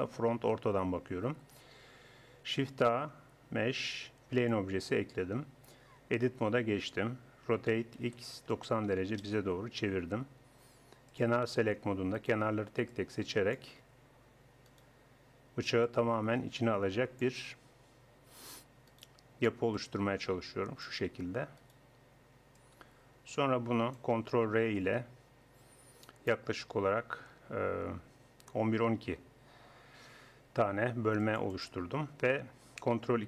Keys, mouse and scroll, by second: 2.6 shift+a, 6.0 Tab, 7.5 r, 11.1-12.2 drag, 12.2 middle click, 12.9 click, 12.9 middle click, 14.5 click, 15.1 right click, 17.2-18.9 drag, 18.9 right click, 20.9-22.6 drag, 22.6-23.6 middle drag, 23.6 click, 24.9 ctrl+r.